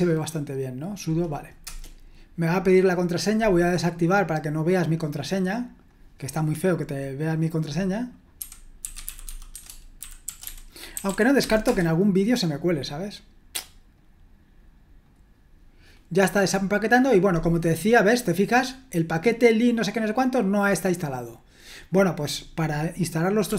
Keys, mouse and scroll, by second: 5.0 right click, 5.8 click, 6.6 click, 18.8-21.5 drag, 21.9-22.9 drag, 23.4-23.5 typing.